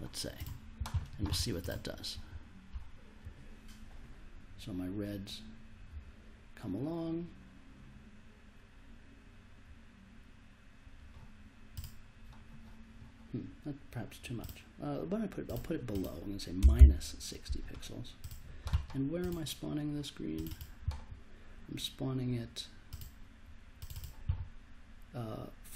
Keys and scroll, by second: 16.6 BackSpace, 16.7 -.